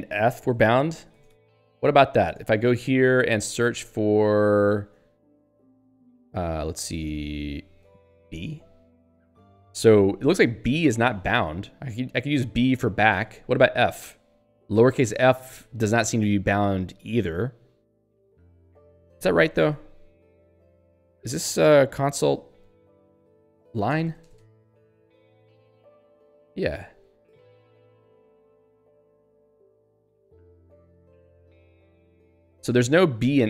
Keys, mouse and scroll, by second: 2.4 Return, 6.3 %, 6.9 ctrl+s, 7.9 ^, 8.3 b, 13.1 BackSpace, 13.3 f, 19.1 ctrl+g, 19.7 ctrl+s, 21.9 ctrl+g, 22.4 alt+x, 22.9-25.8 typing, 25.9 Return, 29.3 ^, 29.7 \, 30.5 *, 31.5 BackSpace, 32.1 f.